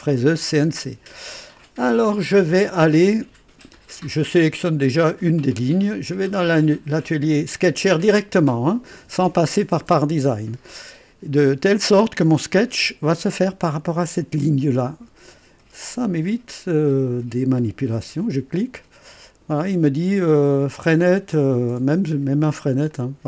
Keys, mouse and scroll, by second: 0.1 click, 1.6 click, 4.9 click, 8.1 click, 18.2 click, 22.9 click.